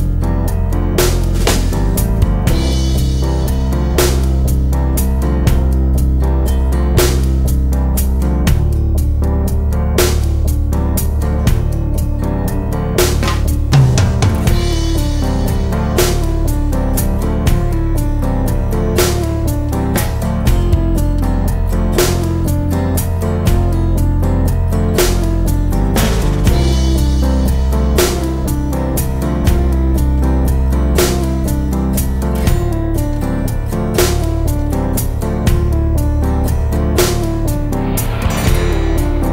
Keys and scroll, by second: 16.6 Return, 19.9 super+c, 20.3 super+f, 21.7 shift+super+f, 36.0-36.9 typing, 38.4 BackSpace, 39.0 5.